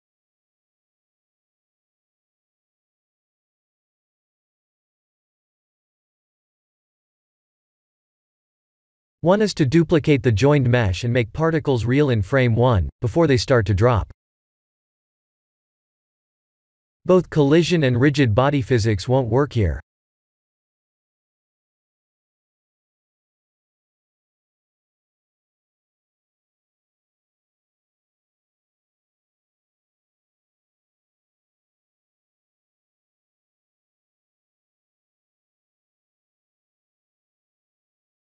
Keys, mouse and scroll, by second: 3.8 click, 6.8 click, 7.9 drag, 8.3 click, 11.3 drag, 13.0 click, 14.2-16.6 middle drag, 18.4 click, 19.0 click, 31.6-32.7 drag, 34.2 click, 38.0-38.3 drag.